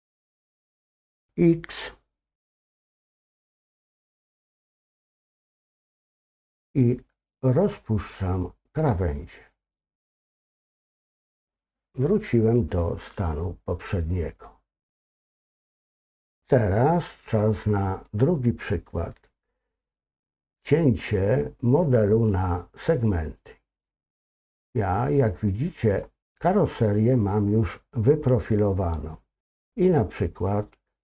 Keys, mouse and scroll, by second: 23.4-23.8 scroll down 1, 23.8-26.0 middle drag, 26.0-26.5 scroll down 2, 26.5-27.2 scroll up 2.